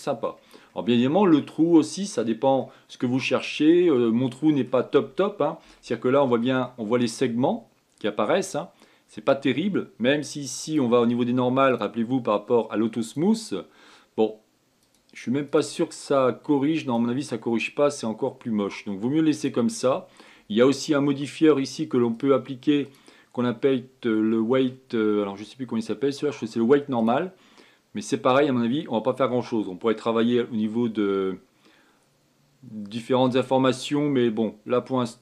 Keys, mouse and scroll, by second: 0.9-1.4 scroll down 1, 1.4-4.1 middle drag, 4.1-4.7 scroll up 5, 4.7-10.4 middle drag, 11.4 click, 12.4-13.9 drag, 15.6 click, 16.2 click, 17.5 click, 20.1 click, 20.6-22.9 middle drag, 22.9 click, 23.5-26.7 drag, 29.0-30.2 scroll down 4, 34.4-35.2 drag.